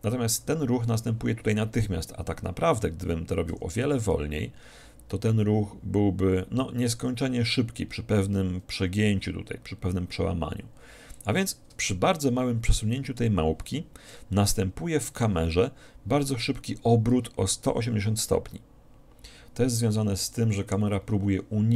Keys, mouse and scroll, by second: 3.6 g, 11.4-13.2 drag, 14.4-16.2 middle drag.